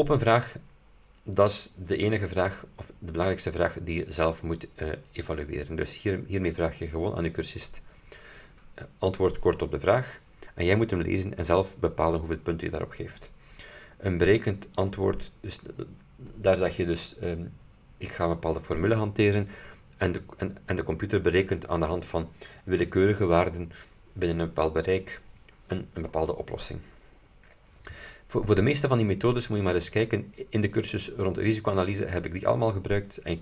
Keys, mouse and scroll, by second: 14.8 click, 29.7-30.0 scroll down 1, 30.3-30.7 scroll up 1.